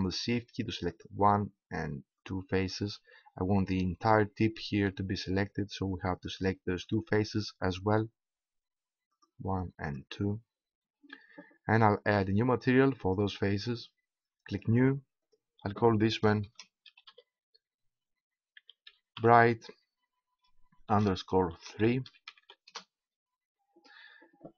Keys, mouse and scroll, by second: 4.3-6.1 middle drag, 6.1-8.3 right drag, 8.3-10.3 middle drag, 10.3-11.3 right drag, 11.3 middle click, 13.0-14.3 right drag, 14.3-17.0 drag.